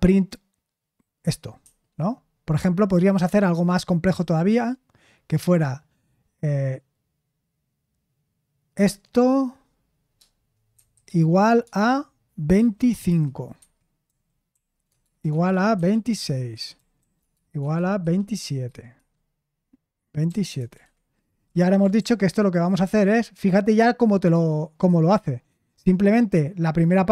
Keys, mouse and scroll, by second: 1.6 Escape, 4.1 a, 10.7 =, 12.5-18.9 typing, 13.6 Escape, 20.0-21.8 typing, 22.0 ctrl+p.